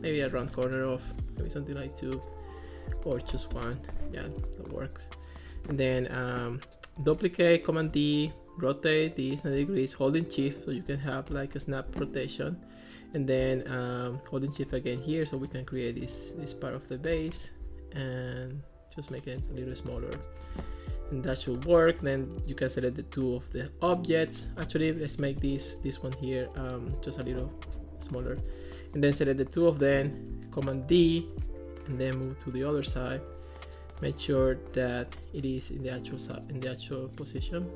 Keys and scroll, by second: 1.1 2, 1.3 Return, 3.3 1, 3.5 Return, 7.0 super+d, 30.9 super+d.